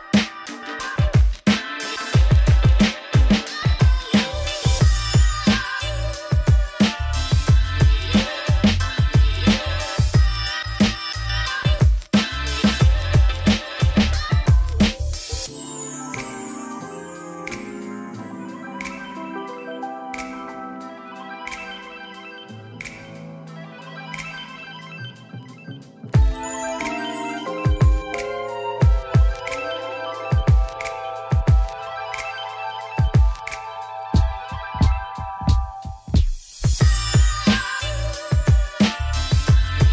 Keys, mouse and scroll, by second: 0.9 click, 1.0 g, 1.6 click, 1.7 middle click, 2.2 ctrl+b, 3.0 click, 3.0 ctrl+b, 3.9 click, 4.0 g, 4.3 click, 4.4 g, 4.8 middle click, 5.1 click, 5.2 ctrl+b, 5.8 click, 5.9 middle click, 6.3 ctrl+b, 7.6 click, 7.7 g, 8.1 click, 8.3 g, 8.9 click, 9.0 ctrl+b, 9.6 click, 10.0 ctrl+z, 10.1 ctrl+z, 10.4 click, 10.6 ctrl+b, 11.7 click, 12.0 g, 12.5 click, 12.6 middle click, 12.8 ctrl+b, 13.2 Tab, 13.3 middle click, 13.5 scroll down 5, 14.2-14.9 scroll up 2, 14.9-18.2 drag, 18.8 click, 18.9-20.7 drag, 21.0-24.2 shift+drag, 24.2 middle click, 24.7-25.1 scroll up 2, 25.1-26.3 middle drag, 27.3-27.7 scroll down 5, 27.7 z, 28.1 click, 28.3 click, 28.4 middle click, 28.9 g, 31.3 shift+d, 32.2 Tab, 32.5 Tab, 32.7 s, 33.7 click, 34.7 alt+d, 35.6 s, 38.8 alt+d, 39.6 click, 39.8 alt+d.